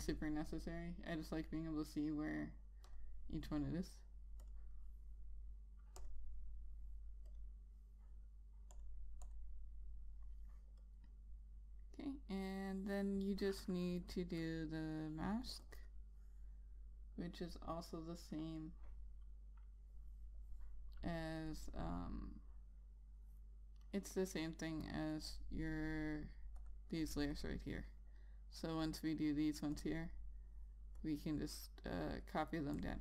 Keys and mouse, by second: 27.3 click, 27.6 double click, 28.8 click.